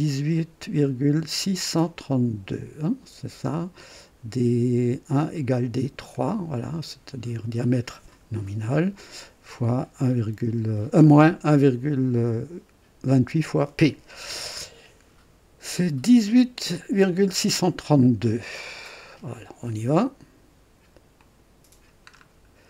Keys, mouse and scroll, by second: 18.8 click, 21.1 click, 22.1 scroll up 1.